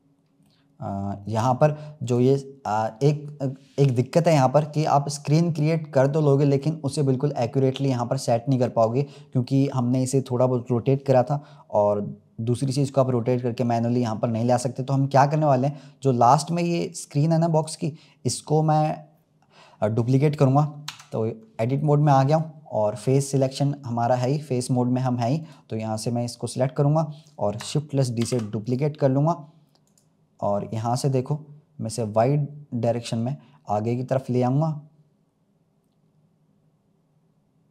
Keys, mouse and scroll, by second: 0.0-0.4 scroll up 1, 0.4-2.0 middle drag, 2.0 click, 2.8-3.3 scroll down 3, 4.2-12.4 middle drag, 16.3 click, 17.4 click, 20.8 Tab, 21.8-24.8 middle drag, 25.3 click, 26.0 scroll up 2, 26.7-28.2 middle drag, 28.2 shift+d, 29.8 click, 30.3-30.6 scroll down 1, 30.6-33.0 middle drag, 33.0 click.